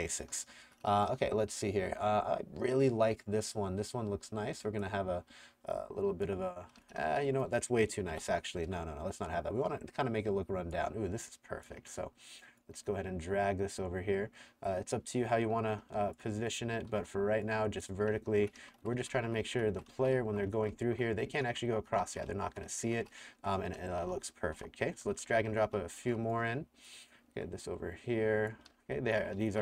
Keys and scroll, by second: 0.0-0.9 typing, 6.5-7.7 typing, 8.1 Delete, 11.9 r, 16.9-26.5 typing, 28.5-29.6 typing.